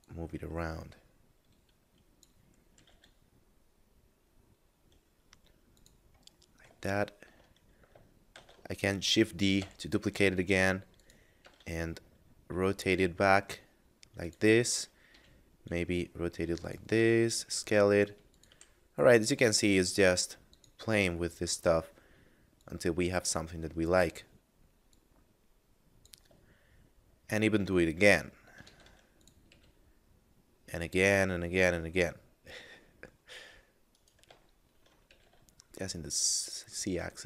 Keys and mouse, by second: 0.0 click, 2.7 g, 2.8 z, 5.5 click, 6.4 middle click, 6.9 shift+middle click, 8.3 shift+d, 9.6 y, 10.9 click, 11.3 r, 11.5 z, 14.2 click, 15.1 r, 16.5 click, 16.9 s, 18.2 click, 18.5 g, 20.5 click, 22.5 click, 24.9 click, 26.5 shift+middle click, 27.7 middle click, 28.5 shift+d, 29.2 click, 29.5 r, 33.8 right click, 34.5 shift+middle click, 35.1 r, 35.3 z.